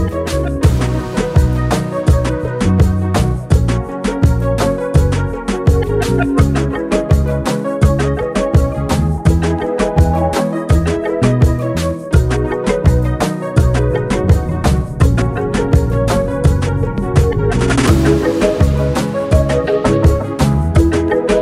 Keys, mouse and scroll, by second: 0.1 Tab, 0.4 click, 1.1 click, 1.7 click, 2.2 x, 3.0 click, 3.3 x, 5.0 alt+click, 6.2 a, 6.6 scroll up 1, 6.9 middle click, 7.5 e, 12.1 alt+middle click, 12.6 scroll down 1, 13.0 shift+middle click, 13.8 click, 14.9 click, 15.3 click, 16.1 shift+click, 16.6 shift+click, 17.1 shift+click, 17.6 shift+middle click, 18.4 ctrl+b.